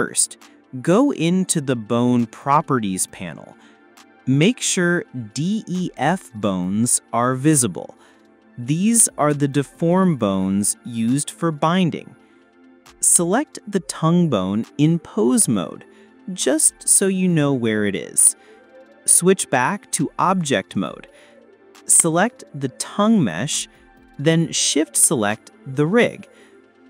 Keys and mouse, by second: 0.0-0.9 drag, 3.0 click, 9.2 click, 11.9 click, 13.5 click, 15.4 shift+click, 16.8 click, 17.6 click, 18.5 shift+click, 20.5 click, 21.3 click, 23.8 shift+click.